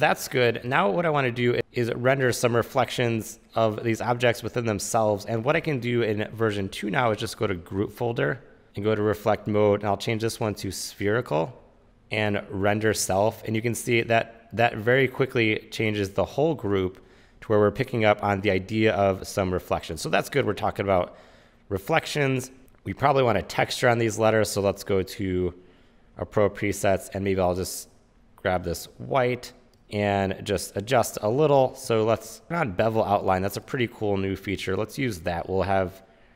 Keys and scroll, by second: 11.8 shift+super+z.